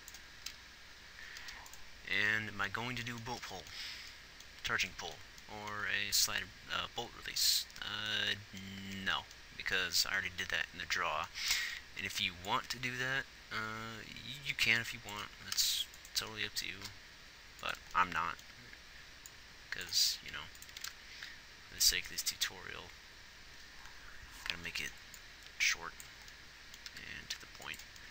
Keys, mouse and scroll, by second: 0.4 g, 15.4 g, 16.7 g, 20.2 r, 20.7 r, 26.9 g.